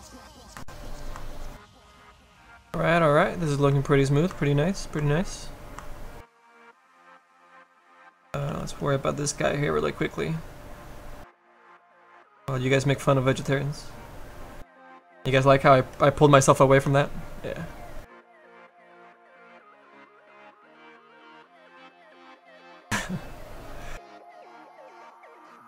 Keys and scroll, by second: 8.4 s, 24.5 s, 25.0 s.